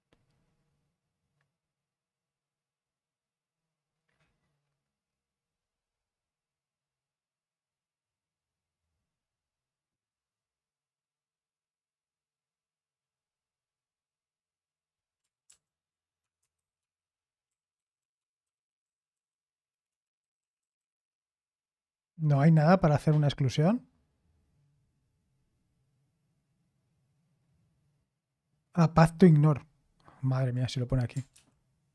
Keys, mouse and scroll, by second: 0.2-0.9 scroll up 1, 0.9-1.5 scroll up 1, 1.5-2.7 scroll up 1, 2.7-3.8 scroll up 1, 3.8-4.6 scroll up 1, 4.6-6.6 scroll up 1, 6.6-11.3 scroll up 1, 11.3-12.4 scroll up 1, 12.4-13.6 scroll up 1, 13.6-15.2 scroll up 1, 15.2 scroll up 1, 15.5 ctrl+p, 16.2-21.3 typing, 24.6-29.3 scroll up 1, 29.3-30.6 scroll up 1, 30.6-31.3 scroll up 1, 31.3 ctrl+p.